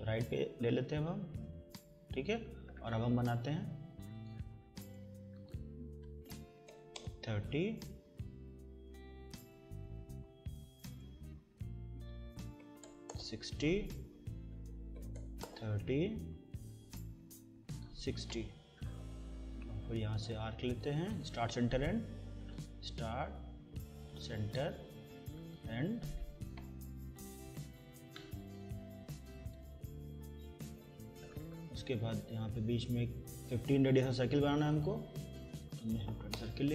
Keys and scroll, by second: 6.2-7.2 typing, 12.6 6, 12.9 0, 13.1 Return, 14.7-15.7 typing, 18.5 Escape, 26.9 Escape, 35.7-36.6 typing.